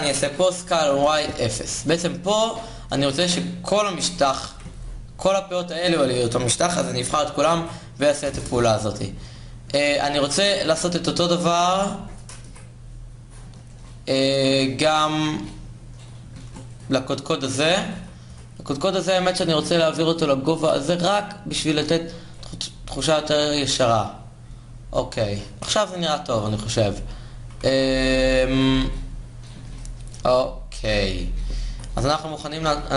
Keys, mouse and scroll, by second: 4.2 ctrl+z, 6.6 s, 9.9 ctrl+Tab, 12.1 KP_1, 16.1 ctrl+Tab, 17.6 KP_1, 17.9 KP_3, 18.9 g, 22.5 a, 25.5 KP_3, 26.2 g, 28.3 Tab, 29.3 Tab, 31.4 a.